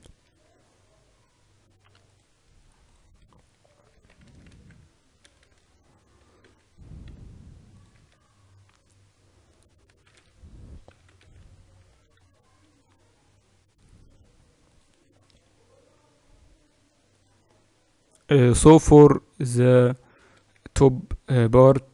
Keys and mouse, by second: 0.1 Tab, 1.9-4.7 drag, 3.9 Tab, 4.1-6.1 typing, 7.8 Tab, 10.0 z, 11.1 alt+h, 14.1-15.1 middle drag, 15.1 right click, 17.0-18.7 drag, 18.7-20.2 middle drag, 20.2 right click, 20.2 KP_2, 20.4 KP_2.